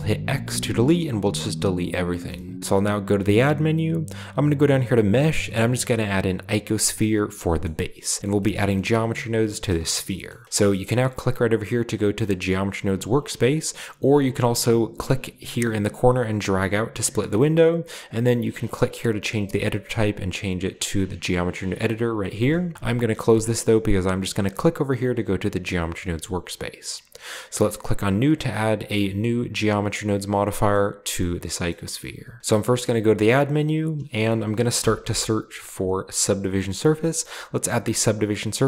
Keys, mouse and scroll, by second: 0.2 x, 1.8-2.6 drag, 3.1 shift+a, 6.5 click, 7.7 middle drag, 7.7 scroll up 1, 8.6-9.0 shift+middle drag, 9.3-11.0 shift+middle drag, 9.3-9.8 shift+scroll up 1, 10.3-10.7 shift+scroll up 1, 13.6-16.0 scroll down 1, 16.0 click, 17.5 click, 22.9-23.9 drag, 24.6 click, 25.6-26.2 scroll up 1, 25.9 middle click, 27.5 click, 29.6 click, 30.5 middle click, 30.7 click, 32.4 scroll down 1, 32.4 b, 32.5 a, 34.6-35.0 typing, 37.2 click.